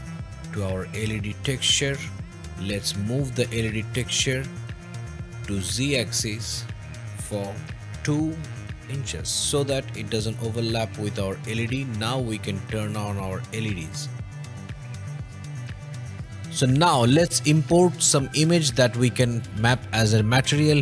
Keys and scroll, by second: 2.7 m, 4.9 Escape, 7.2 2, 8.9 ", 9.4 Return, 11.4 typing, 14.5 o.